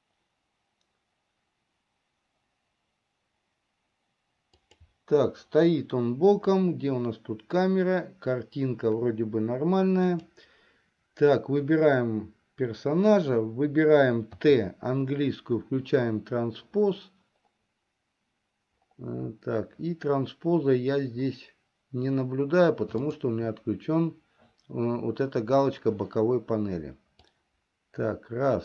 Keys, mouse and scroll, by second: 5.1 Up, 5.2 Up, 10.8 click, 14.5 t, 24.0 click, 27.4 click, 27.6-28.6 drag.